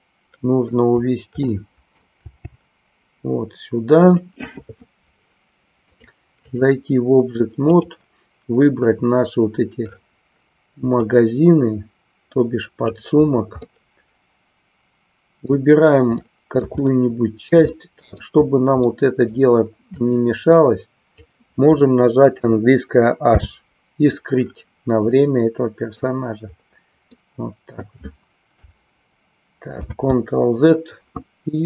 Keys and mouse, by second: 1.4 middle click, 6.0 click, 7.7 click, 11.1-12.9 drag, 13.8-15.6 middle drag, 16.2 middle click, 16.9-18.1 shift+middle drag, 18.9 middle click, 20.1-21.2 drag, 25.2 middle click, 27.2 middle click.